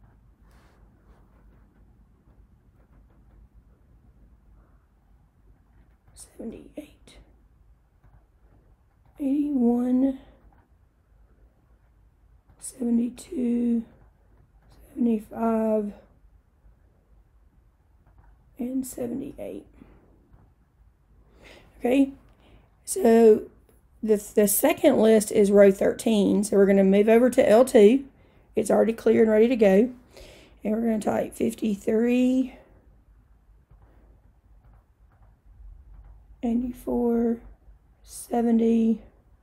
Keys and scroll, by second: 0.0 Return, 6.1 7, 6.6 8, 8.1 Return, 9.1 8, 9.7 1, 10.5 Return, 12.5 7, 13.2 2, 13.9 Return, 14.7 7, 15.4 5, 18.1 Return, 18.9 7, 19.4 8, 20.4 Return, 26.1 Right, 31.0 5, 31.7 3, 33.8 Return, 34.7 8, 35.2 4, 36.0 Return, 36.7 7, 37.4 0, 38.2 Return.